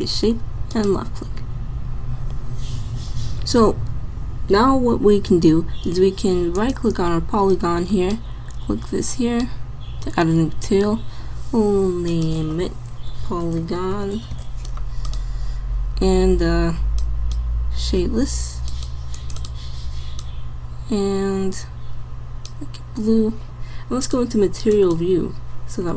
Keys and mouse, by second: 6.6 click, 8.1-10.0 drag, 12.2 click, 24.0 click, 24.5 click, 25.4 click.